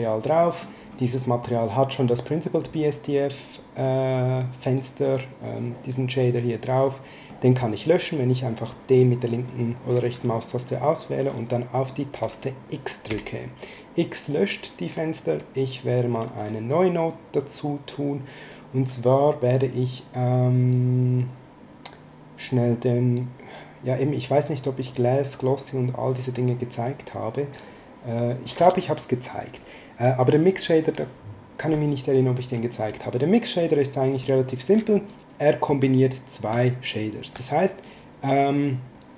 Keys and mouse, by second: 1.2 middle click, 3.8 click, 5.0 click, 7.3 middle click, 13.1 x, 16.4 click, 32.7 click, 34.1 click, 34.9 middle click, 37.8 click.